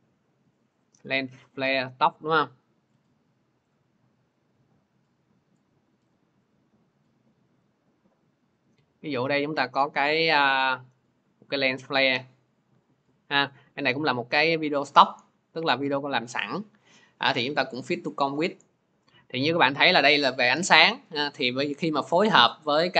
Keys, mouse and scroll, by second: 0.6 click, 3.5 click, 6.0 click, 13.3 click, 14.3 click, 14.3 right click, 17.7 click, 22.7 click.